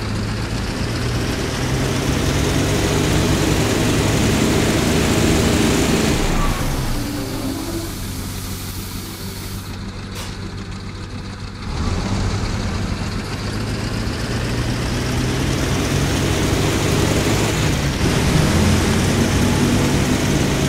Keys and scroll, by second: 2.5 d, 5.1 d, 6.3 s, 11.6 w, 13.4 a, 17.9 a.